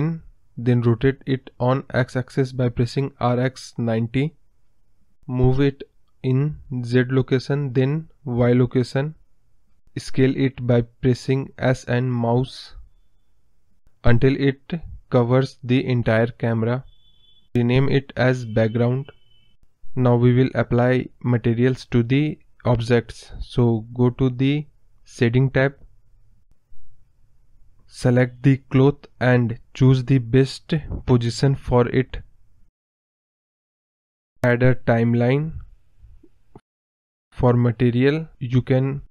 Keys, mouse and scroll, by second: 4.0 shift+a, 5.4 r, 10.5-14.6 drag, 14.6 middle click, 15.2 KP_0, 15.6 scroll down 2, 16.6 s, 19.3 scroll down 3, 19.6-20.4 scroll up 4, 21.0 click, 23.6 click, 24.5 KP_0, 25.0 scroll up 2, 25.2 scroll down 2, 26.8 click, 29.3-32.8 typing, 34.4-37.8 drag, 37.8-39.1 scroll down 3.